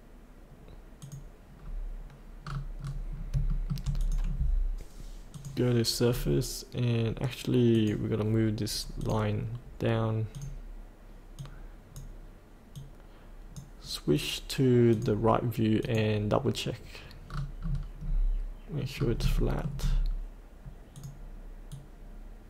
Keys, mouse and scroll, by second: 1.0 click, 1.5 scroll down 1, 2.7-3.1 scroll up 1, 3.5 shift+middle click, 4.0 click, 6.0-6.3 scroll down 1, 7.7-12.5 drag, 17.2 scroll down 1, 18.9 scroll up 1, 19.3 shift+middle click, 19.9-20.9 scroll down 1, 20.9-22.4 drag.